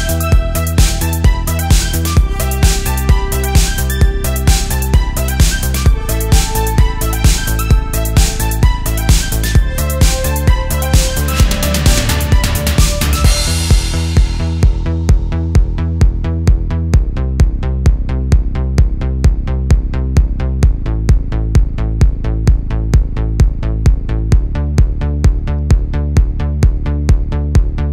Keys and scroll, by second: 0.1 alt+super+space, 7.7 super+space, 8.9 space, 11.7 space, 12.5 space, 14.2 space, 14.8 super+j, 15.3 super+j, 19.3 super+z, 19.5 super+z, 20.3 space, 20.9 super+space, 22.5 space, 25.8 space.